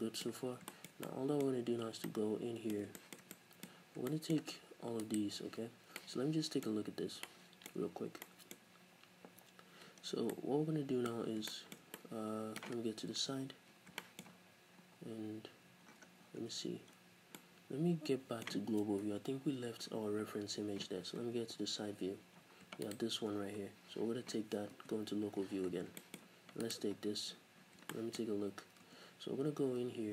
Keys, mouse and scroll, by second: 0.5 scroll down 2, 1.4-1.8 scroll up 2, 1.8 Tab, 2.0-3.3 middle drag, 3.3 click, 3.7-22.9 middle drag, 3.7-4.0 scroll up 2, 5.1 alt+right click, 6.7-7.1 scroll up 2, 8.7 scroll up 1, 10.0 scroll down 1, 11.1 scroll up 1, 13.1 KP_3, 14.2-14.8 scroll up 2, 14.8-15.5 scroll up 1, 15.5-15.8 scroll up 1, 15.8-17.4 scroll down 4, 16.5 Tab, 19.0 KP_Divide, 19.9-21.5 scroll down 2, 21.5-21.8 scroll down 1, 21.8 KP_3, 22.4-22.9 scroll up 2, 22.9 shift+right click, 23.3-23.8 scroll down 1, 24.3-24.7 scroll up 1, 24.7 KP_Divide, 25.4 scroll up 1, 26.0-26.7 shift+middle drag, 26.2-27.3 scroll up 4, 26.7 right click, 27.9-30.1 shift+middle drag, 28.3-28.9 scroll up 2, 28.9 Tab, 29.8-30.1 scroll down 2.